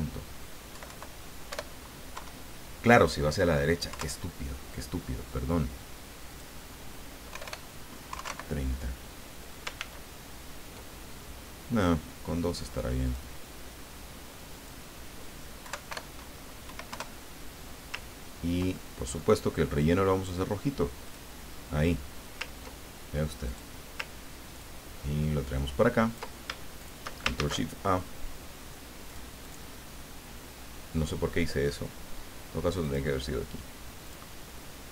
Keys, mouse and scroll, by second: 0.7 Left, 1.5 BackSpace, 2.1 KP_9, 3.9 KP_Enter, 6.3 click, 7.3 BackSpace, 8.1 KP_3, 8.2 KP_0, 8.2 KP_Enter, 9.8 ctrl+z, 13.0 click, 14.5 click, 15.6 Left, 15.9 BackSpace, 16.7 KP_9, 16.9 KP_Enter, 18.2-18.6 ctrl+scroll down 2, 18.7 ctrl+click, 21.0 click, 23.4 click, 24.6-26.2 ctrl+drag, 26.8 shift+click, 27.3 ctrl+shift+a, 29.1 click, 29.4 click, 32.8 click, 34.0 click.